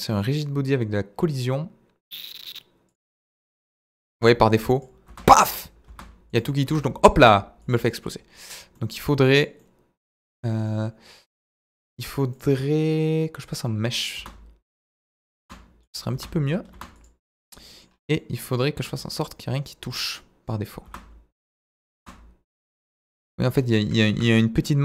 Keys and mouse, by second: 0.1 click, 2.9 click, 3.3-7.2 typing, 7.7 click, 8.8 middle drag, 9.6-10.2 middle drag, 10.7 middle drag, 12.4-13.6 drag, 14.2 space, 15.4 space, 15.8 click, 16.1 space, 16.7 space, 17.6 middle click, 18.2 middle drag, 18.7 s, 19.9 click, 20.1-20.6 middle drag, 20.8 space, 21.9 space, 22.6 click, 23.0-23.5 middle drag, 24.1 KP_1.